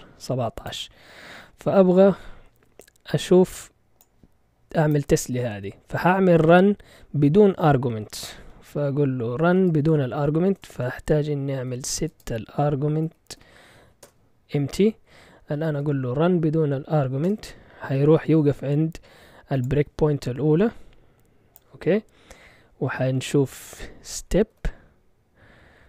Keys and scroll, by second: 9.1-13.8 typing, 14.0 Return, 15.3-16.2 typing, 17.2 Return, 23.6-25.0 typing.